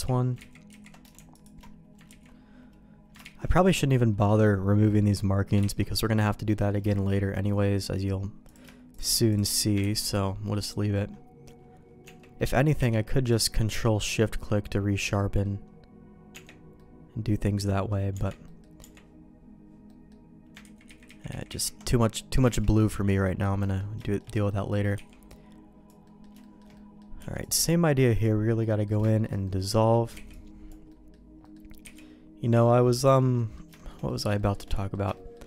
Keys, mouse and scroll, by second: 0.3 ctrl+z, 0.7 ctrl+z, 2.0 ctrl+z, 3.2 ctrl+shift+z, 5.7 ctrl+x, 6.4 middle click, 6.8 shift+middle click, 7.3 shift+middle click, 7.6 middle click, 8.4 click, 8.9 shift+click, 9.8 ctrl+x, 10.0 middle click, 10.5 middle click, 12.0 Tab, 12.3 middle click, 12.7 q, 15.1 middle click, 16.3 Tab, 16.7 middle click, 17.8 middle click, 18.1 Tab, 18.4 middle click, 18.8 Tab, 19.8 middle click, 20.6 ctrl+z, 20.8 ctrl+z, 21.1 ctrl+z, 21.3 ctrl+z, 21.5 ctrl+z, 22.1 middle click, 22.5 shift+middle click, 22.7 middle click, 23.2 middle click, 23.5 middle click, 24.0 shift+middle click, 24.3 middle click, 24.9 b, 26.0 middle click, 26.4 shift+middle click, 26.7 middle click, 27.1 b, 28.6 middle click, 29.0 shift+middle click, 29.4 middle click, 30.1 b, 30.8 middle click, 31.4 middle click, 31.8 b, 33.3 middle click, 33.7 shift+middle click, 34.0 middle click, 34.3 middle click, 34.7 middle click, 35.1 shift+middle click.